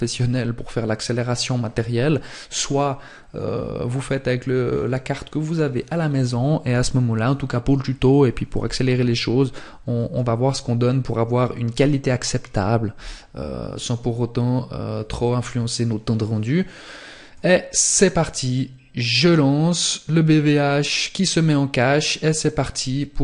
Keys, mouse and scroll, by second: 9.0 click, 16.2 click.